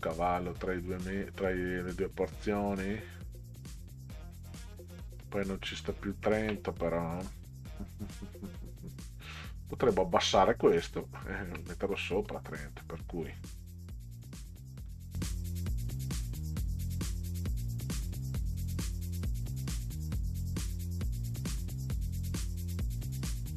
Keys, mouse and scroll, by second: 5.3 middle drag, 5.9-6.5 scroll up 2, 10.1 scroll up 2, 11.9 middle click, 13.3 click, 14.9-15.5 drag, 16.4 click, 17.5 shift+Down, 18.8 click, 19.3 middle click, 19.7-20.1 drag, 20.2 ctrl+click, 20.3 ctrl+click, 20.5 click, 20.8 click, 21.1 middle click, 21.7 ctrl+scroll down 2, 22.4 click, 23.2 middle click.